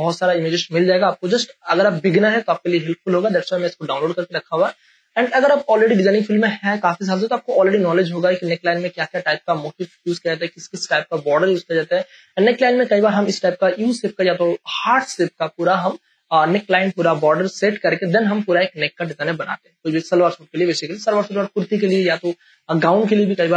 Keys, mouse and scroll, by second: 0.0 click.